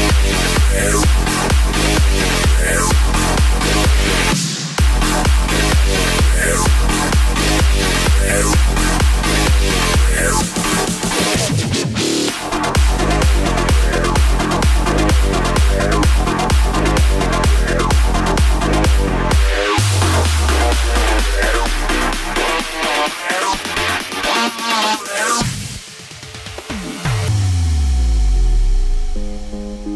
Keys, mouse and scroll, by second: 10.6 KP_0, 12.3 z, 19.8 click, 20.6 KP_0, 24.5-28.1 drag.